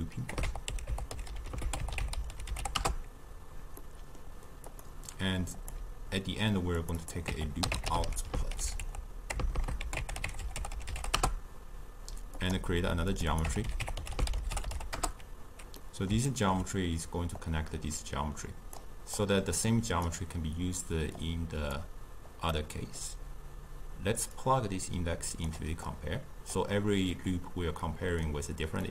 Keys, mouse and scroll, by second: 1.3 o, 3.8-4.7 middle drag, 4.7 click, 5.6 click, 6.8 click, 8.0 o, 9.5 BackSpace, 9.6 BackSpace, 12.4-13.3 drag, 14.9 click, 15.8-17.4 middle drag, 17.4-19.3 drag, 21.2 click, 22.5-24.4 middle drag, 24.4-28.9 drag.